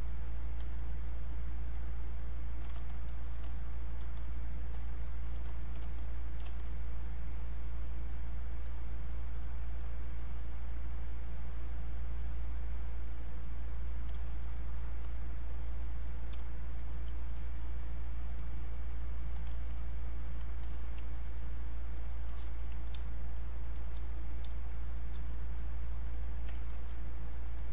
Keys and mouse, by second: 2.9-7.4 shift+drag, 7.4-15.8 drag, 16.4 space, 16.7 click, 16.9 space, 17.7 click, 20.7 alt+click, 22.3 alt+click, 23.0 space, 23.4 click, 23.5 space, 25.6 click, 26.7 alt+click.